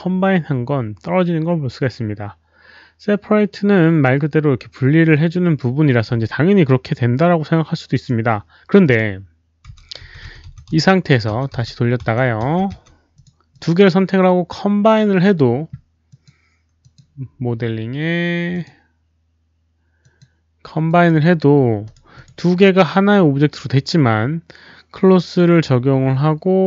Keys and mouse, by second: 4.8 click, 7.9 click, 8.8 click, 9.7-11.2 typing, 10.0 click, 10.2 click, 10.5 click, 12.4 z, 13.1 click, 13.5 drag, 16.0 click, 16.7 click, 18.5 click, 18.5 z, 20.0 click, 20.8 click, 20.8 z, 21.8 click, 21.9 z, 22.1 click, 23.8 click.